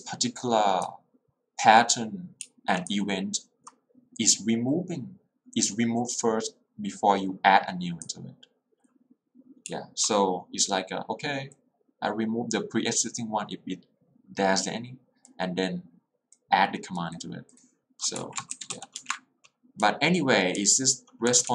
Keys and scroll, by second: 0.0 l, 2.6 h, 3.0 l, 9.7 h, 18.2 Escape, 18.7 w, 18.9 w, 19.1 Return, 19.8 j, 20.7 k.